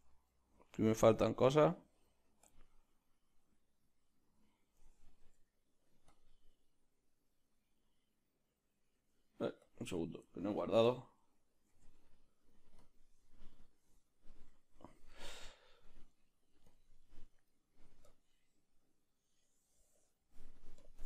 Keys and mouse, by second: 6.9 z, 14.4-18.1 right drag, 18.1-21.0 drag.